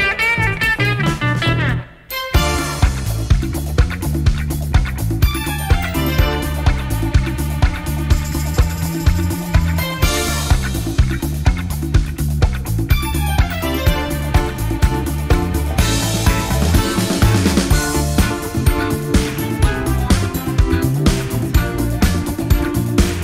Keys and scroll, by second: 3.2 F1, 4.6 shift+F6, 12.7 F1, 13.3 ctrl+-, 13.8 space, 14.3 shift+F6.